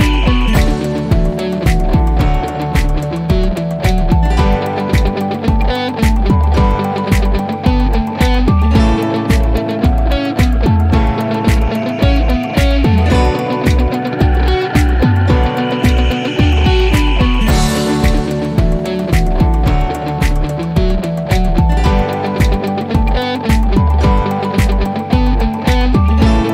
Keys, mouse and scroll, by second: 2.2 click, 8.0 click, 11.4 click, 14.3 click, 14.8-15.2 scroll down 1, 17.5 click, 21.2 l, 21.8-22.5 scroll down 1, 22.8-26.5 drag.